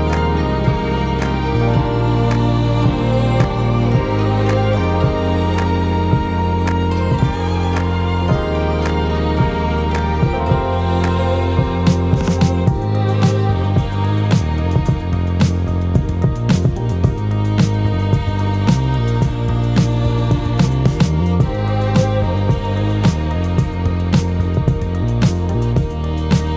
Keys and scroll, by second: 19.0-21.8 ctrl+z.